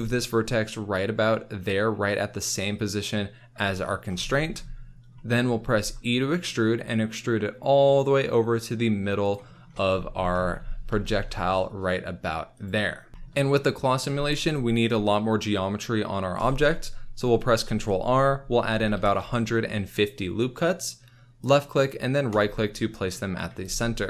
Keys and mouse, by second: 2.7 click, 5.8 e, 9.2 click, 10.8 g, 12.5 click, 17.6 ctrl+r, 18.7 KP_1, 18.9 KP_5, 19.0 KP_0, 21.4 click, 22.3 click, 23.5 z.